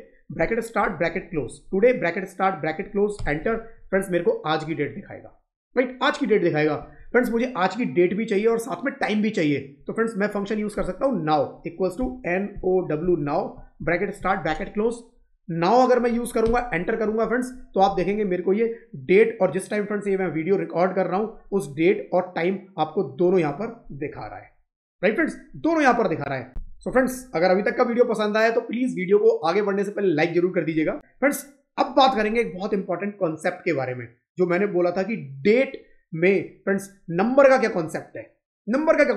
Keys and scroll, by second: 3.6 Up, 6.7 Down, 16.9 Up.